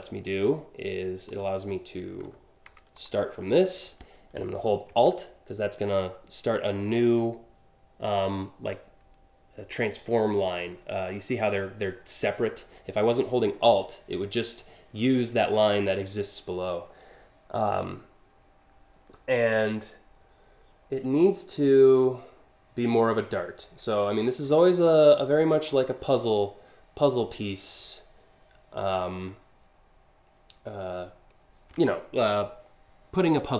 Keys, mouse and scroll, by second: 0.8 click, 2.5 click, 9.3-22.7 alt+drag, 24.0-24.5 scroll up 2, 25.3 alt+scroll down 3, 33.4 scroll down 1.